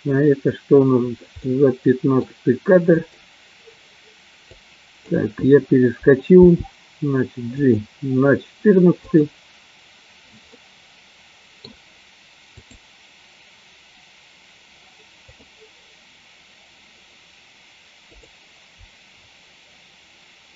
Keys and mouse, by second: 1.7 middle click, 3.6 click, 4.6 click, 6.8 g, 7.9 click, 9.6 click, 10.7-11.7 middle drag, 13.2 click, 15.8 click.